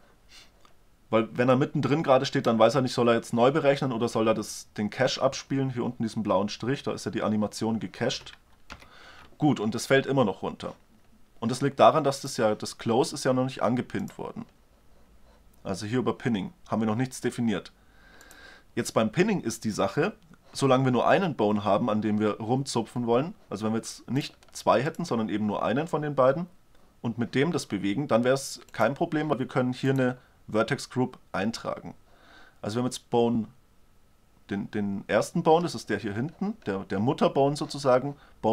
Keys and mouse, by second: 1.3-1.8 drag, 8.4 shift+Left, 11.9-13.6 drag, 13.8-15.7 drag, 18.0-19.8 drag, 23.8-24.5 drag, 24.5-26.5 right drag, 28.3-29.5 right drag, 29.5 middle click, 30.2 right click.